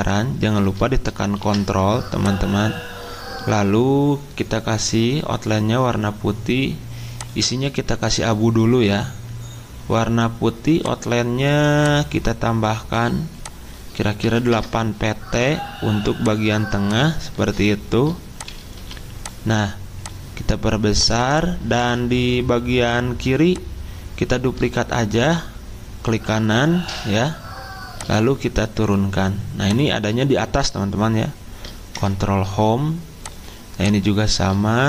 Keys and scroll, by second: 1.3 ctrl+s, 14.2 8, 14.5 Return, 18.7 c, 31.9 ctrl+Home.